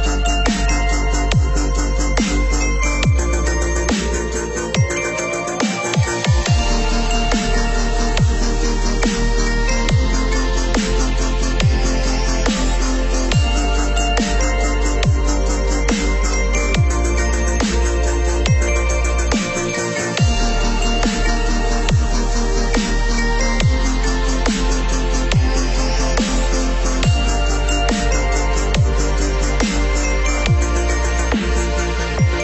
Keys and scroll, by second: 7.4 ctrl+-, 8.3 ctrl+0, 17.8 ctrl+=, 31.8 ctrl+-.